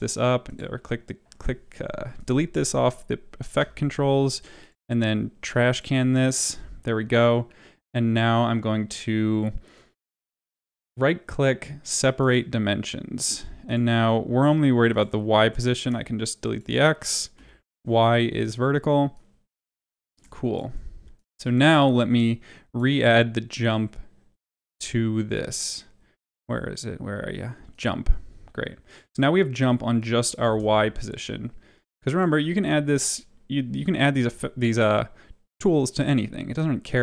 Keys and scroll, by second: 3.5 Delete, 17.3 Delete, 30.4 space.